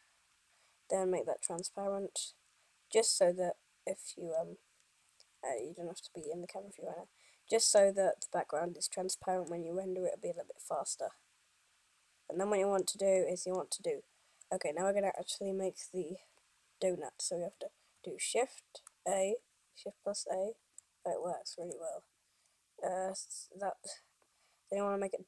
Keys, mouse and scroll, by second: 1.6 click, 2.6-3.3 scroll up 4, 3.3 scroll down 2, 4.6 scroll up 1, 5.1 scroll down 2, 5.6 KP_1, 6.3 middle click, 8.1-8.5 scroll down 1, 9.5 scroll up 1, 9.7 middle click, 13.4 middle click, 19.0 shift+a.